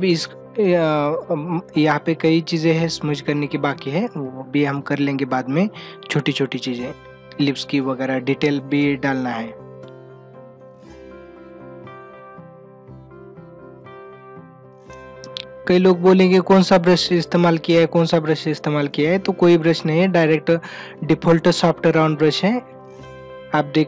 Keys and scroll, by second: 8.5 ], 10.0 ctrl+-, 10.2 space, 14.7 ctrl+alt+z.